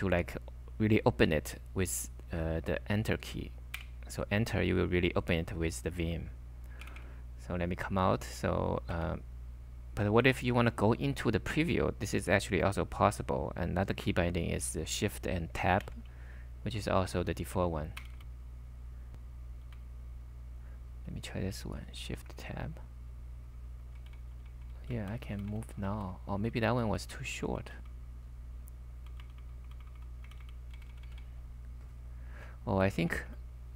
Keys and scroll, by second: 3.8 Return, 6.8-8.9 typing, 15.8 shift+Tab, 17.0-18.1 typing, 18.2 shift+Tab, 19.7 typing, 22.2 shift+Tab, 23.1-24.8 typing, 28.9-32.4 typing.